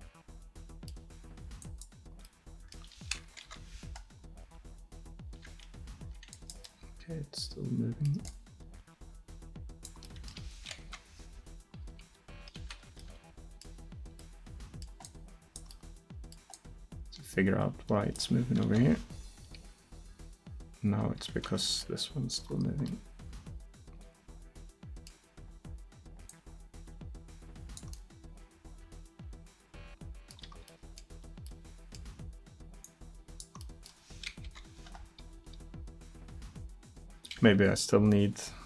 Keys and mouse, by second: 2.3-3.5 middle drag, 3.5 KP_7, 4.5-6.4 drag, 4.5 r, 6.9-7.9 drag, 10.9 KP_7, 11.9 r, 15.1 middle drag, 15.3-15.7 drag, 16.3-18.5 middle drag, 18.7 KP_7, 19.4 r, 23.8-26.1 middle drag, 26.3-28.6 middle drag, 29.9-30.7 middle drag, 32.9 click, 34.5 KP_7, 35.4 r.